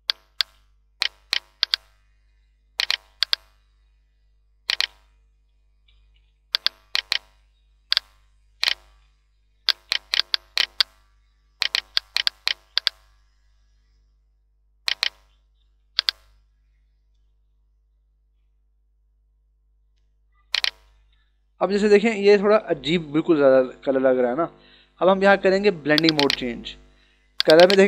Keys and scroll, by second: 6.4 h, 8.8 b, 9.2 ], 15.7 [, 21.0 ctrl+-, 22.8 ctrl+=, 24.1 ctrl+=.